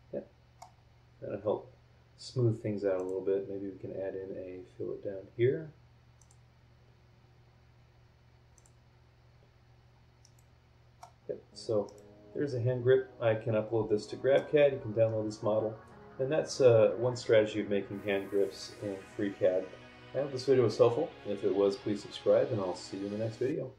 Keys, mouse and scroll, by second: 0.8 scroll down 1, 1.4 scroll up 1, 2.9 click, 6.2 click, 8.5 click, 9.4 scroll down 1, 9.7-10.2 scroll up 2, 10.2 middle click, 10.3 click, 11.1-11.6 scroll down 1, 11.8-14.5 drag, 14.6 scroll down 1, 15.0-15.4 scroll up 1.